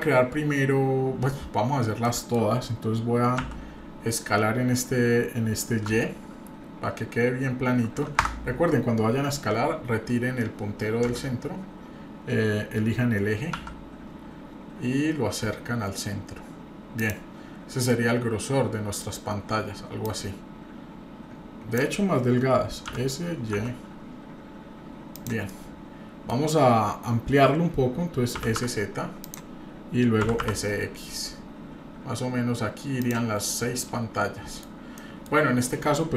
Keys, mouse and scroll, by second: 2.0 middle click, 3.4 s, 11.0 s, 17.9-19.0 middle drag, 20.0-21.8 drag, 22.9 s, 25.5-26.2 middle drag, 28.4 s, 30.2 s, 33.4-34.6 middle drag, 34.7 scroll down 1, 35.0 middle drag.